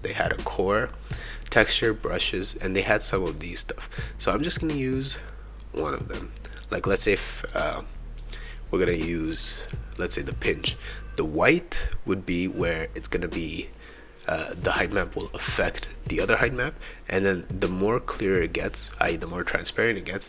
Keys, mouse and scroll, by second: 5.8 click, 6.9 click, 7.5 click, 9.3-10.3 drag.